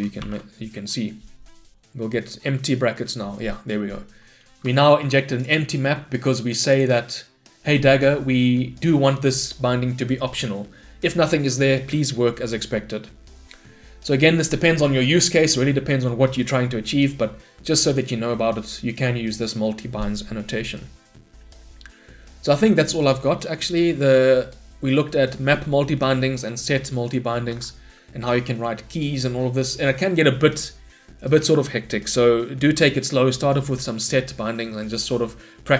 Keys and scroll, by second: 0.2 ctrl+y, 0.2 shift+F10, 4.7 shift+Escape.